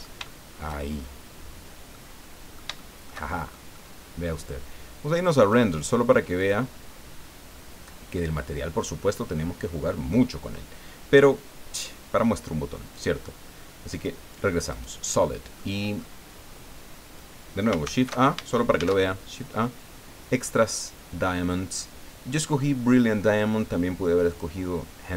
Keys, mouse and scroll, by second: 0.9-1.2 shift+scroll up 3, 1.4 scroll down 2, 1.9-3.7 middle drag, 3.7-4.0 shift+scroll up 3, 4.1 scroll down 2, 5.4 click, 6.4 click, 12.8 click, 13.9 click, 14.7 right click, 15.2 middle click, 15.9-16.3 scroll up 2, 16.3 scroll down 2, 17.8 ctrl+shift+a, 18.7 shift+a, 24.3 click.